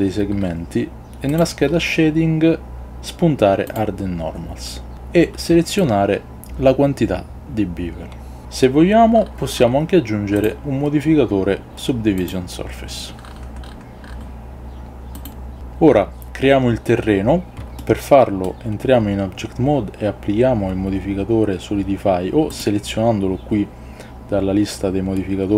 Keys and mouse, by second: 12.6-17.6 drag, 17.6 ctrl+z, 17.9-18.5 middle drag.